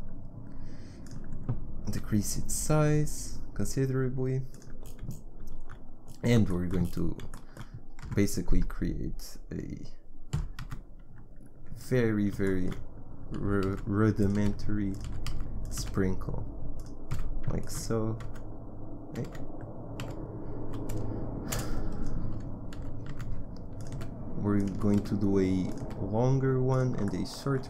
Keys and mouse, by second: 1.9 s, 8.0 Tab, 10.4 e, 13.4 e, 14.4 s, 15.1 e, 15.8 s, 17.1 f, 19.3 super+f, 20.0 z, 20.6 a, 21.7 b, 22.8 e, 24.0 s, 24.7 e, 25.8 s.